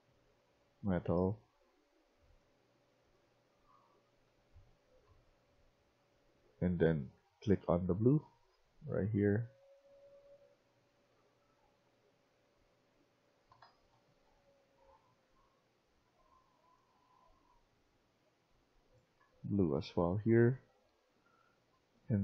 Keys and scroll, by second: 4.2-10.8 typing, 12.9-14.5 typing, 19.1-21.9 typing.